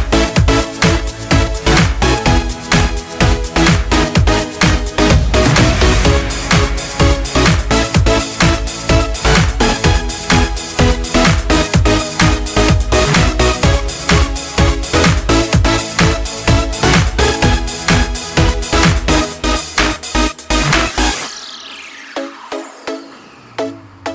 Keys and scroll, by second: 10.5 ctrl+space, 12.3 ctrl+space.